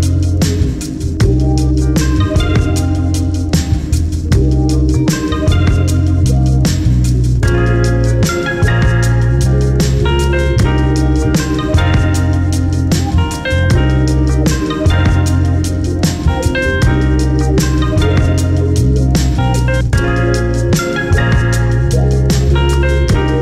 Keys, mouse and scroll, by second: 0.6-2.5 drag, 1.0 `, 2.1 1, 2.9 KP_Decimal, 4.0 alt+click, 4.7 x, 5.1-5.4 scroll down 2, 5.6 `, 5.9-6.2 scroll up 2, 6.2 2, 6.6 alt+click, 7.3 alt+click, 7.8-8.2 scroll down 2, 8.6 `, 8.9-9.4 scroll up 1, 9.4 1, 9.6 click, 10.0 shift+click, 10.4 j, 10.8 scroll down 1, 11.0 `, 12.3 `, 13.4 scroll up 1, 17.9 Tab, 20.6 click, 21.6 alt+click, 21.8 `.